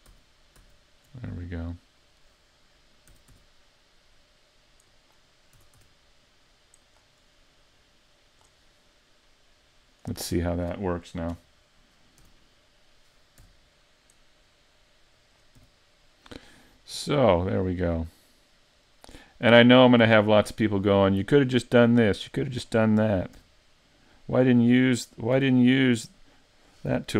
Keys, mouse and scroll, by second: 0.1 super+z, 0.6 super+z, 1.3 middle click, 3.1 s, 5.6 s, 7.8 click, 8.7 middle click, 10.4 middle click, 11.3 KP_7, 12.2 z, 12.6-13.4 scroll up 2, 13.4 r, 15.3 click, 15.6 g, 15.7 z, 22.6 click, 23.4 r, 24.7 click, 25.4 g, 26.6 click.